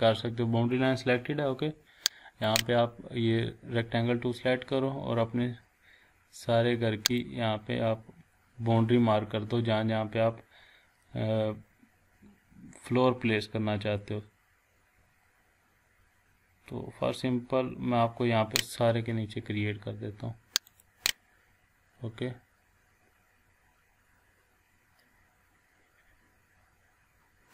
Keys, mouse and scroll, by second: 2.5 click, 4.2-4.6 scroll up 1, 7.2-18.7 drag, 8.7 scroll down 1, 20.7 click.